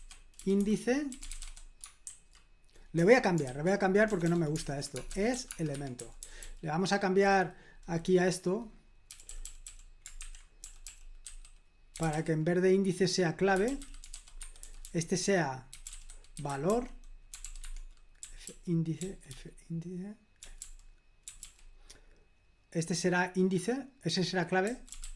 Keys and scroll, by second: 0.0-1.9 typing, 3.4-6.7 typing, 9.1-12.1 typing, 13.3-21.9 typing, 24.4-25.1 typing.